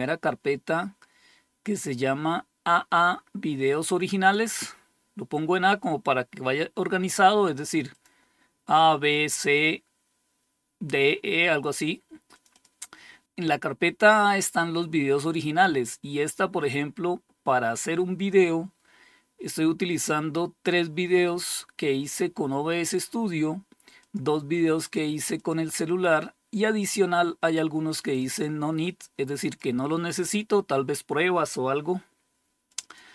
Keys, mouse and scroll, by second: 3.7 click, 7.4 click, 11.8 click, 12.0 click, 23.5 click, 24.2 click, 24.8 click, 27.5 click, 27.8 click, 28.9 click, 32.1 click, 32.3 click.